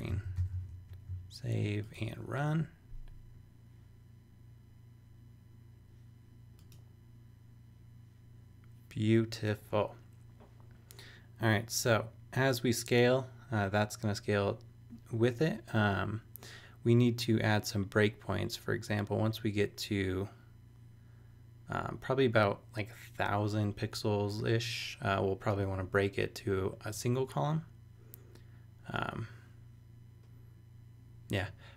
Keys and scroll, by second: 0.0-0.8 typing.